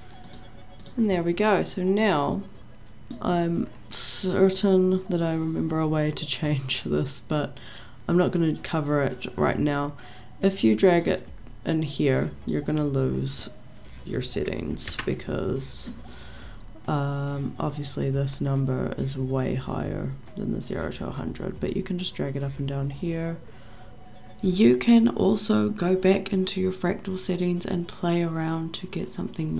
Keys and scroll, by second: 15.0 ctrl+z.